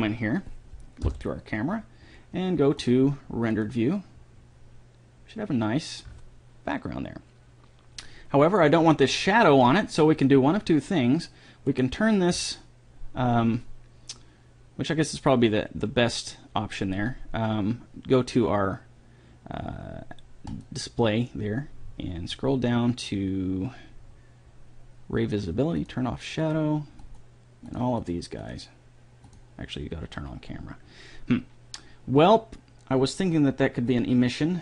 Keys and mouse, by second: 1.5 KP_0, 3.2-5.0 drag, 12.2-14.0 right drag, 20.9-22.8 drag, 26.3-31.5 drag, 34.4 click.